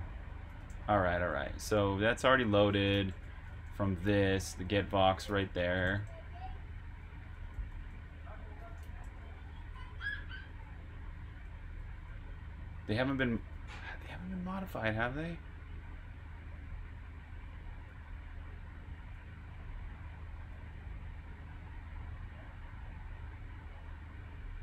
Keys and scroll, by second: 0.3-4.5 typing, 8.5-9.5 typing, 11.9-14.1 typing, 16.6-20.5 typing.